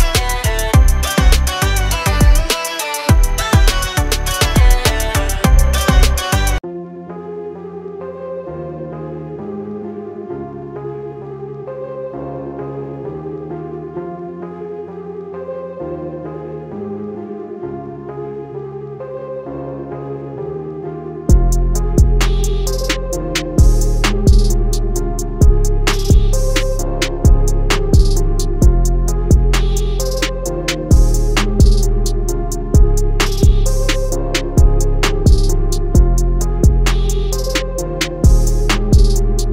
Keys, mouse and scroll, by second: 1.5-2.6 alt+scroll down 4, 2.6 click, 5.4 i, 8.9 click, 9.5-10.7 alt+scroll down 3, 10.8-11.2 scroll up 2, 11.5 scroll up 1, 13.4 click, 25.1 scroll down 1, 25.9 scroll up 1, 26.9 scroll down 1, 28.7 click.